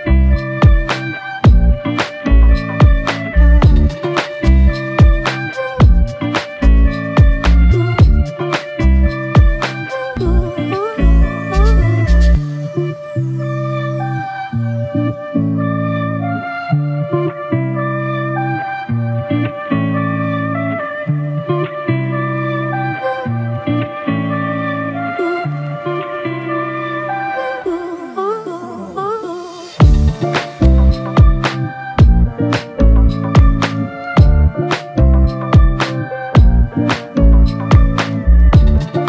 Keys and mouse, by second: 2.1 alt+click, 6.7 alt+click, 7.0 shift+click, 8.4 alt+click, 13.2 alt+click, 14.5 f, 15.2 double click, 19.7 alt+click, 24.1 shift+click, 25.7 alt+click, 26.4 alt+click, 28.5 g, 29.2 alt+click, 31.9 typing, 32.8 double click, 35.8 f, 36.8 double click.